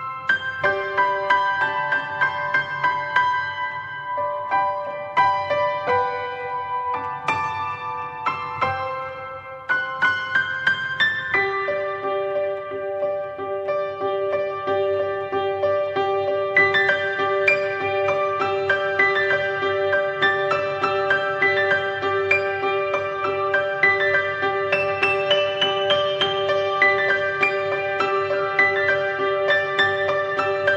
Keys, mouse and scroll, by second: 3.3 shift+middle click, 3.4 scroll up 1, 4.8 shift+middle click, 4.9-5.3 shift+scroll up 1, 5.3 click, 8.1 middle click, 8.4 scroll up 1, 8.5-9.3 middle drag, 9.3 click, 11.7-12.4 middle drag, 12.4 click, 19.2-20.6 middle drag, 20.6 scroll up 1, 20.8-23.1 shift+middle drag, 23.1-23.6 drag, 26.5-27.8 middle drag, 27.8 scroll down 1, 28.0-28.9 middle drag, 28.9 click, 29.1-30.7 shift+middle drag.